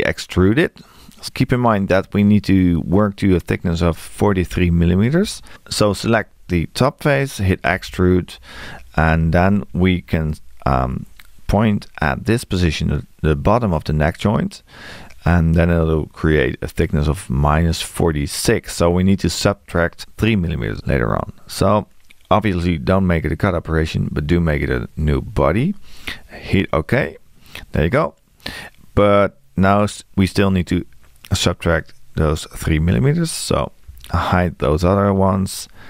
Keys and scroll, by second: 7.7 e.